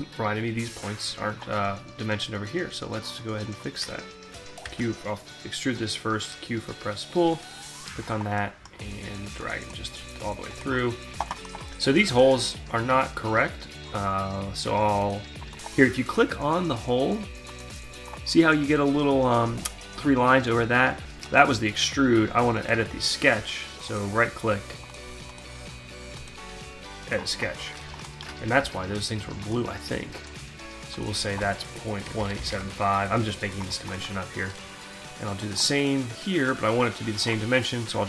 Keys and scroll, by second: 4.2 q, 28.2 d, 31.8-32.9 typing.